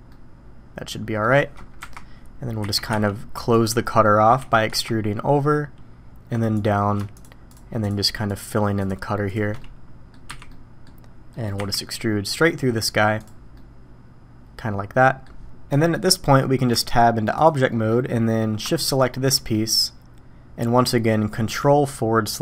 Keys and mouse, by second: 0.1-1.2 middle drag, 1.8 KP_1, 2.6 e, 4.4 e, 7.5-7.9 shift+drag, 8.8 shift+drag, 9.3 shift+drag, 9.6-10.1 drag, 10.3 f, 10.5 click, 11.3 click, 11.6 e, 13.5-14.6 drag, 14.6-15.2 middle drag, 15.4-15.9 middle drag, 16.7 Tab, 17.7 click, 18.9 shift+right drag, 19.5-20.6 middle drag.